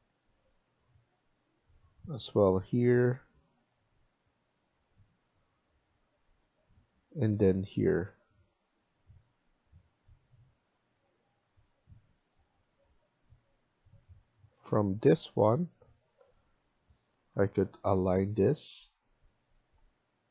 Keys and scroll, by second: 2.8 Escape, 11.1 Escape, 16.2 Escape, 17.1-17.8 typing.